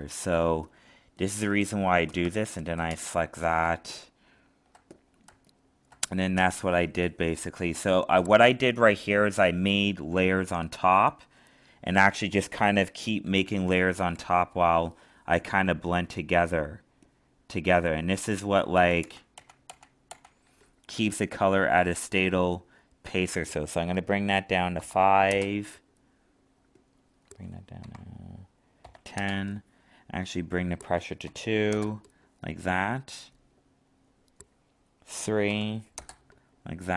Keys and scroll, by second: 3.6 alt+space, 18.7 ctrl+z.